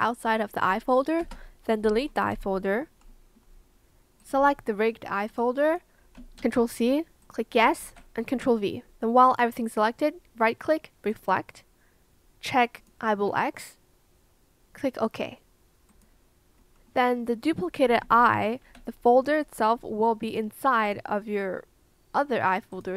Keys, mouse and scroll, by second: 1.2 BackSpace, 2.2 Return, 6.3 ctrl+c, 7.7 ctrl+v, 18.0 Escape.